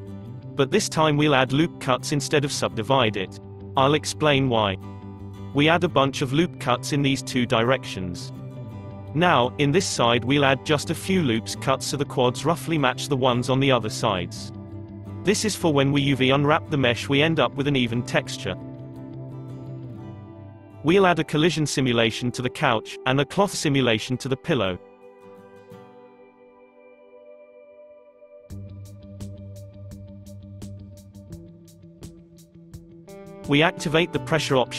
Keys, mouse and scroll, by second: 0.0 ctrl+r, 5.1 ctrl+r, 9.6-12.5 middle drag, 12.5 ctrl+r, 14.6-16.4 middle drag, 16.4 Tab, 17.1-17.8 middle drag, 17.8 click, 19.8 click, 20.7 click, 22.0 click, 22.6-24.0 middle drag, 24.0-24.9 drag, 27.3-31.6 drag, 31.6-34.1 scroll down 13, 34.3 click.